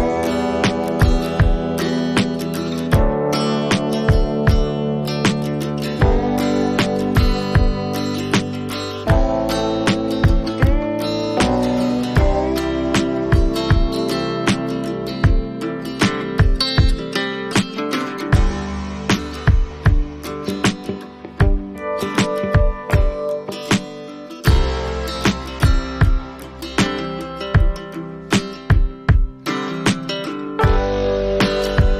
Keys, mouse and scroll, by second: 0.1 click, 2.0 click, 2.6 click, 5.1 click, 7.8 click, 14.8 click, 15.8 click, 17.1 click, 23.8-24.8 click, 24.6 click, 25.1 click, 25.6 click, 29.5 click, 30.9 click.